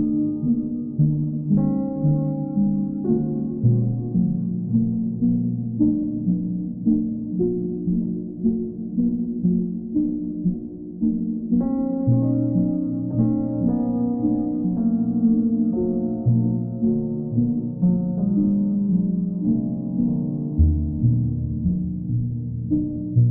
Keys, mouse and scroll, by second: 0.1 alt+click, 1.1 alt+click, 3.2 ctrl+click, 4.2 ctrl+click, 8.5 click, 9.7 click, 10.1 shift+click, 10.6 alt+click, 11.1 alt+click, 12.6 ctrl+click, 13.4 click, 13.9 click, 17.7 click, 19.0 click, 19.2 ctrl+click.